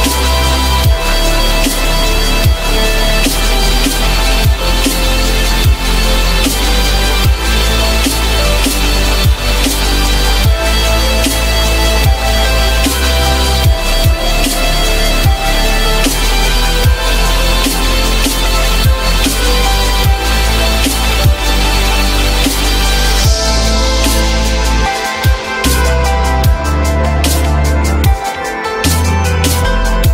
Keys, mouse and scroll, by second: 17.0 F4, 18.2 F4, 19.0 alt+middle click, 29.1 alt+middle click.